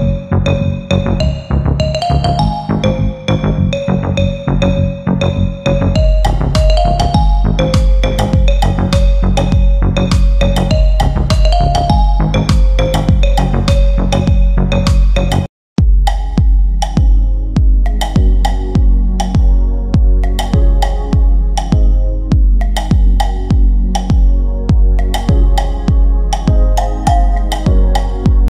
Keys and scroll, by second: 3.3 shift+F2, 3.7 F3, 4.0 Escape, 9.8 g, 18.1 shift+F2, 18.5 Escape, 19.4 F9.